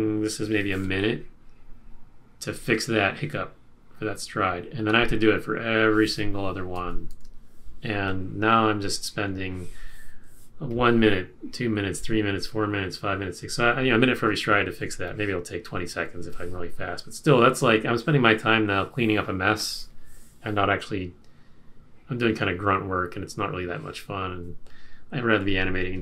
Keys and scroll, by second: 6.7 super+-.